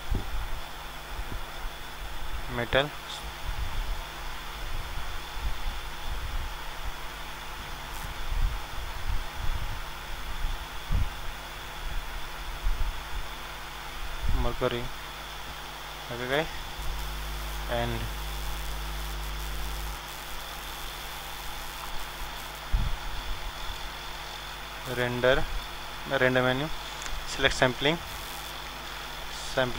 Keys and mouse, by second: 23.8-29.7 drag.